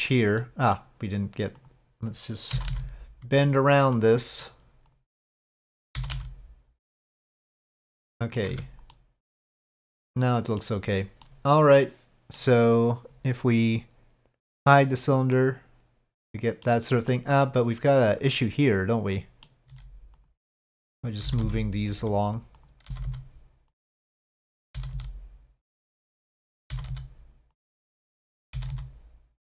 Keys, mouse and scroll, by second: 0.4 middle click, 1.6 click, 2.5 g, 3.9 middle click, 4.9 click, 5.4 click, 8.2 middle click, 8.5 Tab, 8.9-10.6 middle drag, 11.2-12.4 middle drag, 14.8 click, 15.3-16.6 middle drag, 17.1-17.4 middle drag, 19.1 middle click, 19.8 middle click, 20.1 click, 20.1 g, 21.2 g, 22.6 click, 22.9 g, 24.3 click, 24.7 g, 26.3 click, 26.7 g, 28.5 g.